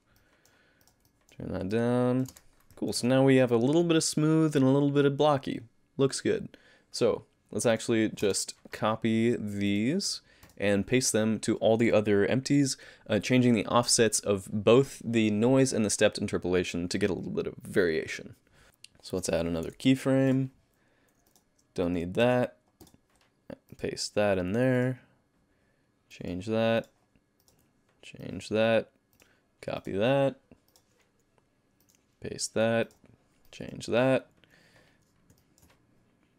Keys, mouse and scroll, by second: 0.2 middle click, 0.8 click, 1.1 middle click, 1.7 click, 2.3 space, 2.9 alt+a, 7.7 click, 8.2 space, 9.7 click, 10.5 click, 18.6 click, 19.2 click, 19.6 i, 21.3 click, 22.1 click, 22.2 x, 22.8 click, 23.7 click, 24.8 click, 26.1 click, 26.8 click, 27.4 click, 28.2 click, 29.2 click, 29.8 click, 30.7 click, 31.8 click, 32.9 click, 33.5 click, 35.4 middle click.